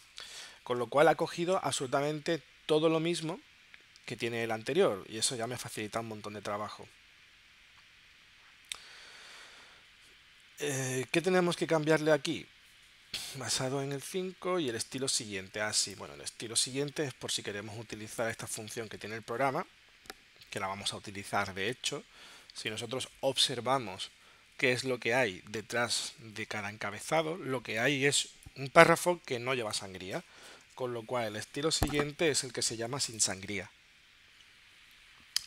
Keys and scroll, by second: 23.8 super+Tab.